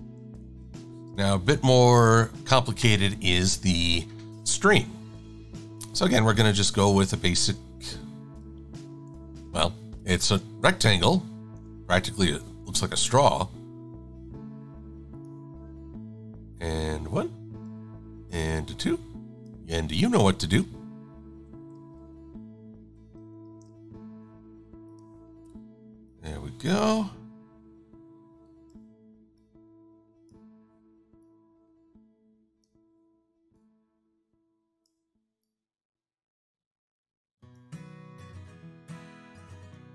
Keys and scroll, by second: 0.5 shift+x, 1.0 shift+super+a, 20.0-22.9 typing.